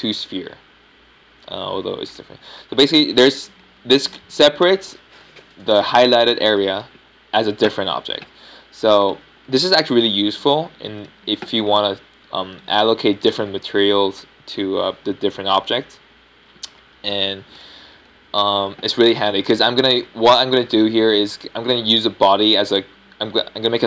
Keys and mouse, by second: 0.2 g, 0.5 right drag, 1.2-2.0 middle drag, 4.1-10.3 middle drag, 10.4 g, 11.4-15.4 middle drag, 12.2 Tab, 12.7 Tab, 13.2 Tab, 19.0 p, 20.1 Tab, 20.6 Tab, 21.3 Tab, 21.8 Tab.